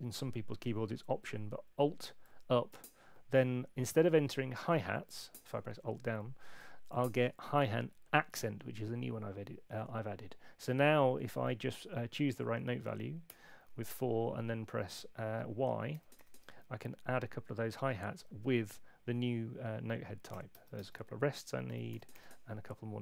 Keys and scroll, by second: 13.2 4, 15.9 y, 20.3 5, 20.5 space, 21.6 4.